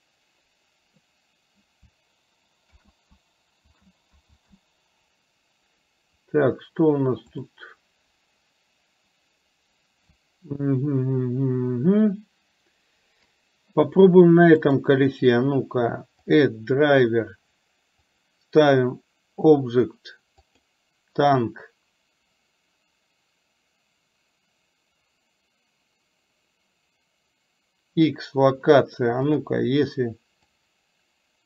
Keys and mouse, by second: 2.8 ctrl+z, 4.6 ctrl+z, 7.4 click, 29.4 click, 30.6-31.4 drag.